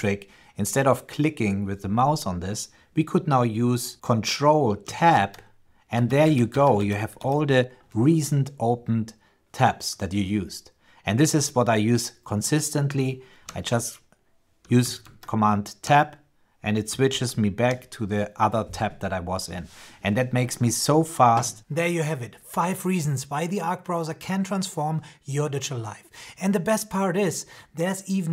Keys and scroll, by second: 4.9 ctrl+Tab, 14.8 ctrl+Tab, 16.8 ctrl+Tab.